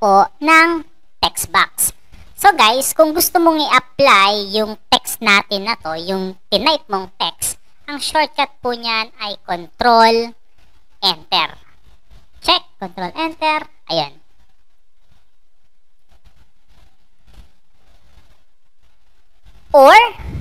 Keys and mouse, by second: 13.0 ctrl+Return.